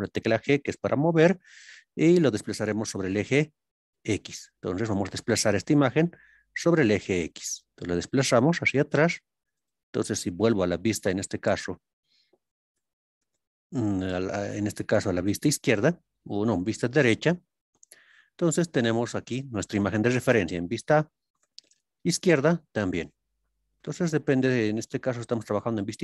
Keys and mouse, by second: 4.7 click, 9.5 click, 11.3 ctrl+KP_1, 12.7 ctrl+KP_3, 21.4 ctrl+KP_3, 23.6-24.9 middle drag.